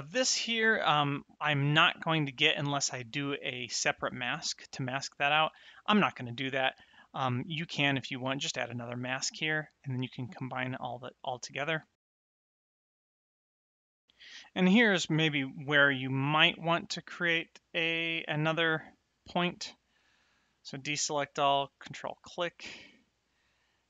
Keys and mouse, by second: 12.3 click, 12.6 middle click, 12.8 click, 12.9 middle click, 13.1 click, 20.2 a, 21.9 ctrl+click, 23.6 click.